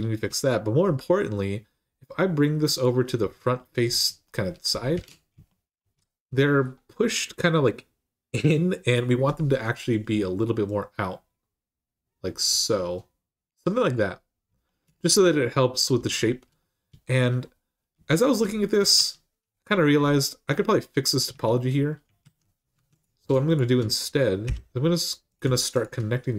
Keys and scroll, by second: 4.8 alt+z, 18.7 Tab, 21.1 Tab, 22.0 alt+z, 22.5 1, 24.2 j.